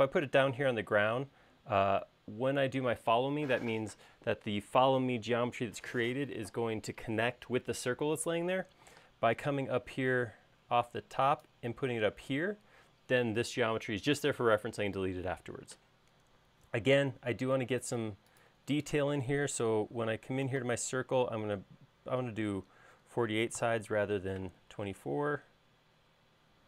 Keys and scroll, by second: 17.1 Escape, 20.7-21.5 typing, 23.0-24.0 typing.